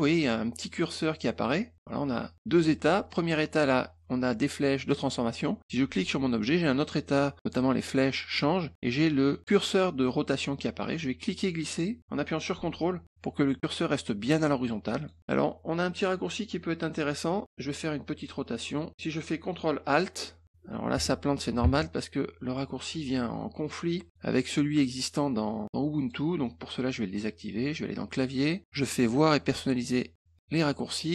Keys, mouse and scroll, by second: 6.3 click, 11.3-15.0 drag, 18.4 click, 20.9 Escape, 21.6 alt+Tab, 25.7 click, 28.4 click.